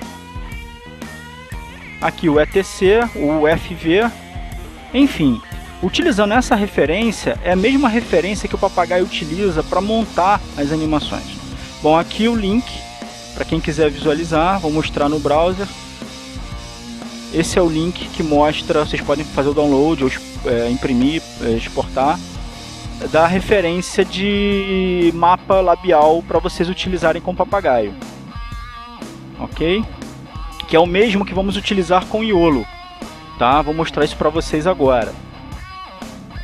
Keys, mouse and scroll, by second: 0.8 click, 1.8-2.9 scroll down 3, 3.3-3.8 scroll down 2, 6.1-6.8 scroll down 2, 7.4-8.0 scroll down 2, 8.2-10.0 scroll up 6, 10.7-12.5 drag, 14.1 alt+Tab, 15.2 Tab, 15.8 Tab, 18.2 click, 19.0-22.0 scroll down 6, 22.4-23.0 scroll down 1, 23.1-26.1 scroll up 11, 28.9 click, 30.9 click, 32.8 right click, 33.8 click.